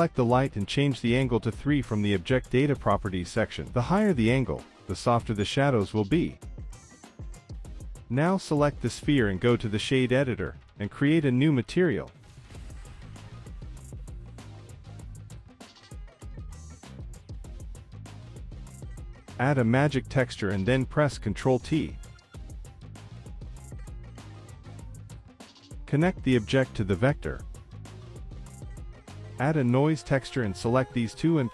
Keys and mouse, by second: 1.4 z, 3.0 click, 4.8-6.1 drag, 7.2 click, 8.6 click, 9.4 z, 10.5 click, 11.4 click, 12.8-13.4 drag, 14.4 click, 15.1 click, 16.7 click, 17.6 z, 18.3 middle click, 18.7 click, 18.8 shift+a, 21.7 middle click, 22.4 click, 22.6 click, 23.0 click, 24.2 ctrl+t, 24.8 middle drag, 25.1 g, 25.7 click, 26.1 middle click, 26.7 middle click, 27.1 click, 27.9-28.7 drag, 28.9 click, 29.1 middle click, 29.8 shift+a.